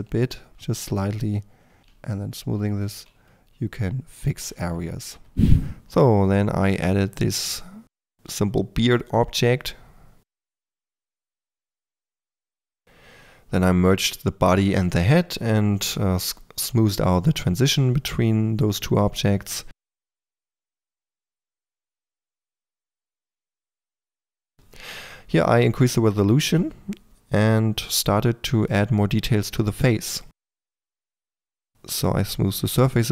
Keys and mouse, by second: 1.0-1.8 drag, 1.8 f, 3.2-4.8 drag, 5.8 middle click, 6.2-7.1 drag, 8.2 Tab, 8.7 shift+Tab, 8.9-12.8 typing, 9.1 click, 10.0 ctrl+a, 10.5 Tab, 11.3 Tab, 12.7 Tab, 13.7 click, 15.6 Tab, 16.1 click, 16.2 3, 16.4-18.2 drag, 17.1 f, 18.2 f, 18.4-19.4 drag, 19.5 KP_4, 19.7 f, 20.1 click, 20.6 f, 21.4 f, 22.0 click, 22.8 f, 23.2-24.0 drag, 23.2 f, 23.8 f, 24.4 Tab, 24.6 click, 25.0 click, 25.0-26.4 typing, 26.6-27.0 drag, 27.4 drag, 27.5-33.1 typing, 27.8 click, 30.1 drag, 30.9 click, 31.2 click, 31.9-32.4 drag.